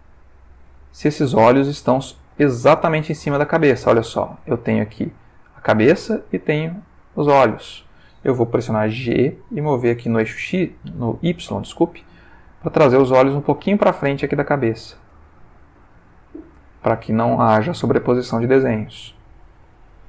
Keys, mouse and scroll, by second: 0.0-4.0 ctrl+middle drag, 5.4 click, 7.0 click, 9.1 g, 10.1 x, 11.4 y, 15.0 space, 15.4 middle click, 16.3 middle click, 16.7-19.7 middle drag.